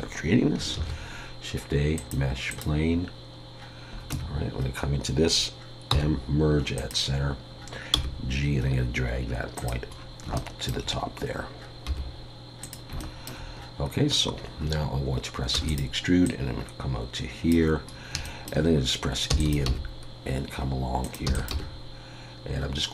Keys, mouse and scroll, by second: 0.7 shift+a, 3.6 scroll down 1, 4.1 Tab, 5.9 m, 7.9 g, 9.9 scroll up 6, 10.3 shift+middle click, 11.9 g, 13.0 shift+middle click, 15.5 e, 16.2 click, 17.9 scroll up 2, 18.2 shift+middle click, 19.7 e, 19.7 g, 21.3 e, 21.5 g.